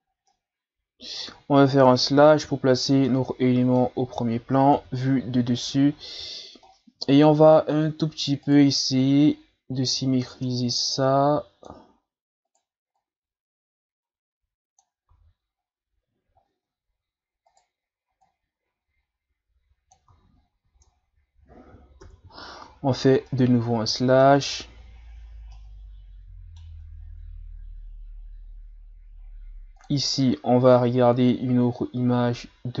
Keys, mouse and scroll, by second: 0.1 scroll down 2, 0.3-1.9 middle drag, 1.9 KP_Divide, 2.4 Tab, 3.1-4.7 middle drag, 4.7 KP_7, 5.9-6.2 shift+scroll down 6, 6.2-6.7 scroll up 3, 7.1 ctrl+scroll down 3, 7.4 scroll up 1, 7.7 Tab, 8.5 right click, 9.0-12.0 drag, 12.5 right click, 13.0-15.1 drag, 15.1 Tab, 16.5 Tab, 17.5 right click, 18.3-20.1 drag, 20.1 Tab, 20.6 a, 20.8-21.8 scroll down 1, 22.0 KP_Divide, 23.0 scroll down 4, 23.3-24.6 middle drag, 24.6-24.9 shift+scroll down 3, 24.9-25.5 scroll up 5, 25.5-27.0 middle drag, 27.0-28.5 ctrl+scroll down 2, 28.5-29.8 ctrl+scroll down 1, 29.8-32.8 drag.